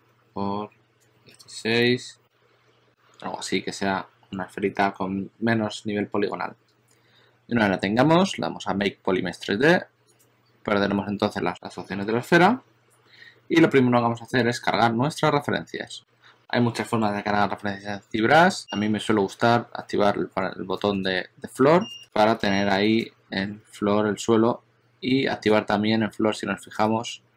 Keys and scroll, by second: 1.0-2.0 typing, 1.8 Return, 20.9 shift+super+a, 21.4 shift+super+a, 23.5 shift+super+x, 25.3 shift+super+a, 25.7 shift+super+a.